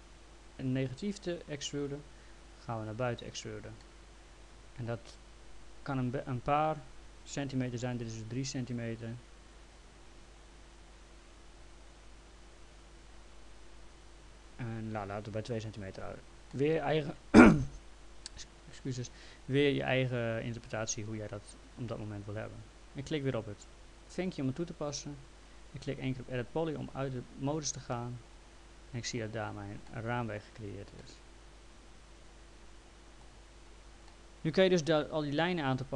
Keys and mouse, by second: 1.8 right click, 2.4 click, 3.8 alt+middle click, 11.3 click, 16.5 alt+middle click, 24.0 click, 26.6 click, 27.9 alt+middle click, 29.9 alt+middle click, 30.6 click, 31.0 alt+middle click, 34.1 alt+middle click.